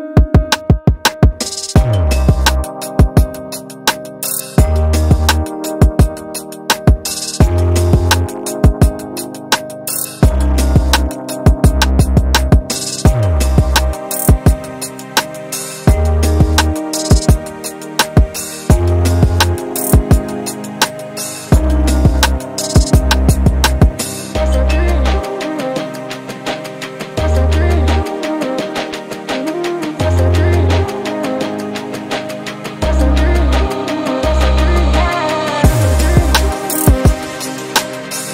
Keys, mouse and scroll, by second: 0.2-0.9 scroll up 3, 0.9 scroll down 1, 1.0-3.5 middle drag, 3.5 click, 4.6-5.1 scroll down 4, 5.1-7.0 middle drag, 7.0 g, 9.0 click, 9.3 middle click, 10.2 shift+click, 10.9 g, 12.1 KP_1, 12.4-12.8 scroll down 5, 13.3 KP_7, 13.6-14.0 scroll up 5, 14.0 shift+middle click, 14.7 click, 15.4-15.7 scroll up 2, 15.7-16.1 scroll down 1, 16.1-17.1 shift+middle drag, 17.1-18.0 scroll down 7, 17.4 Tab, 18.0 drag, 18.3-20.3 middle drag, 20.3 KP_1, 20.7-21.5 scroll up 2, 21.5 click, 22.7 click, 23.3 Tab, 23.8 shift+middle click, 24.0-24.5 scroll up 5, 24.5-27.1 shift+middle drag, 27.1-27.5 scroll up 2, 27.5 z, 28.1 shift+middle click, 28.6 z, 29.3 ctrl+r, 31.2 ctrl+r, 33.5 Tab, 33.7-34.8 scroll down 3, 34.8 click, 35.3 Tab, 36.1 g.